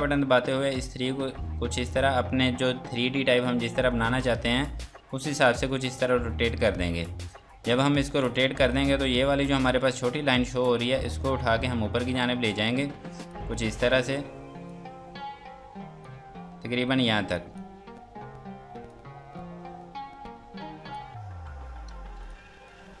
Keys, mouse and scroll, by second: 7.2 click, 7.8 F3, 8.3 click, 13.0 F2, 13.3 click, 17.1 F2, 17.3 click, 21.3-21.7 scroll down 1, 21.9 space, 22.2 click.